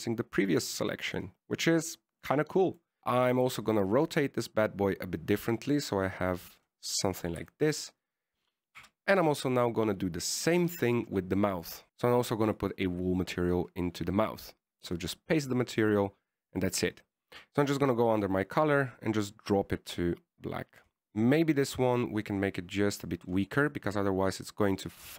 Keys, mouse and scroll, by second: 3.0 middle click, 3.2-3.9 scroll up 3, 3.9 click, 3.9 scroll up 3, 5.4 click, 8.8 shift+middle click, 9.3 right click, 10.1 Tab, 11.9 click, 11.9 middle click, 11.9 scroll down 3, 13.0 click, 13.8 click, 17.9 middle click, 19.0 click, 22.4 middle click, 23.3 middle click, 24.0 click, 24.7 middle click.